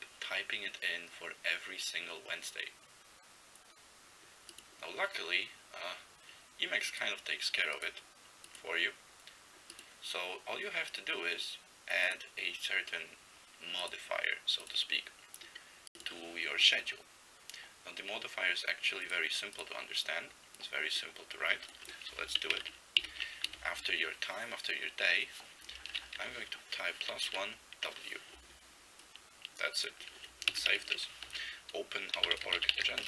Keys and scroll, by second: 22.5 ctrl+n, 22.5 ctrl+e, 23.0 ctrl+b, 23.5 space, 26.2 1, 27.3 w, 30.6 ctrl+x, 30.7 ctrl+s, 31.2 alt+x, 31.9-33.0 typing.